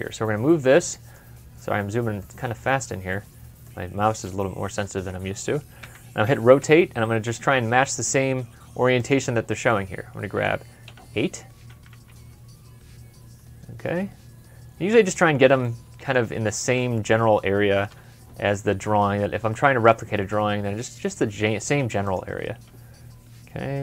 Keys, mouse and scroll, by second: 0.2 scroll down 1, 0.6 middle click, 1.2-1.5 scroll up 1, 1.5 scroll down 1, 1.7 scroll up 1, 2.1 middle click, 2.9-3.5 scroll up 1, 6.1-6.5 typing, 10.7 typing, 11.9 typing, 15.5 middle click, 17.7 middle click, 22.2 m, 22.2 scroll up 1.